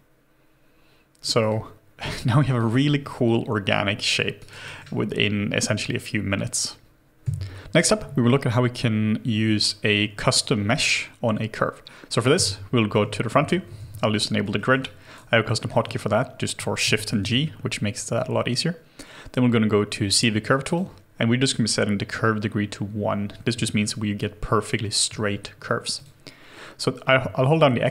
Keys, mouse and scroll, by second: 1.5 alt+click, 2.1 alt+right click, 2.6 alt+click, 2.9 alt+middle click, 3.3 alt+click, 4.4 alt+right click, 4.6 alt+middle click, 7.2 Delete, 12.4 space, 13.3 f, 13.8 shift+g, 14.5 shift+g, 14.6 alt+middle click, 14.8 alt+right click, 15.5 alt+middle click, 16.9 shift+g, 27.1 x.